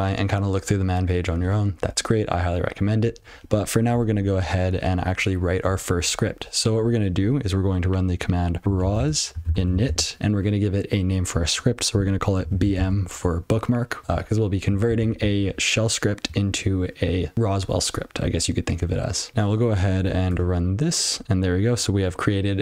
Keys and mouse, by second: 8.6-10.2 typing, 12.1-14.0 typing, 19.3 F12, 19.9 BackSpace, 20.2 Return, 21.3 click.